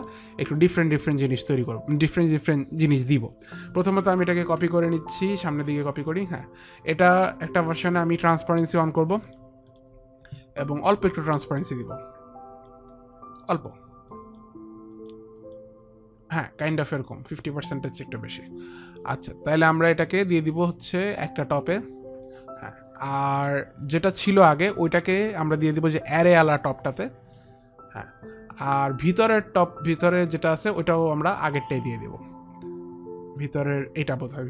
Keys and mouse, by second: 0.1 click, 0.6 click, 4.7 ctrl+click, 6.9 ctrl+click, 9.3 click, 9.8 click, 12.1 click, 13.6 click, 14.0 click, 15.1 click, 19.7 click, 24.3 click, 25.3 click, 32.1 click.